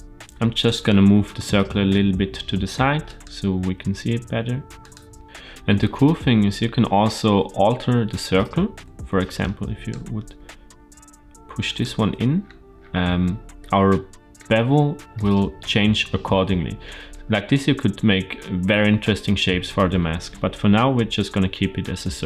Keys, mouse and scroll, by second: 0.2 g, 3.6 g, 5.2 middle click, 7.3 KP_Decimal, 8.0-8.9 scroll down 1, 8.9 Tab, 8.9-9.3 scroll down 1, 9.3 click, 10.2 g, 11.8 Tab, 12.1-13.1 scroll down 6, 13.1-13.5 shift+middle drag, 13.7-14.2 middle drag, 14.4-15.0 scroll up 3, 15.0-16.7 middle drag, 20.5 ctrl+z, 21.1 ctrl+z.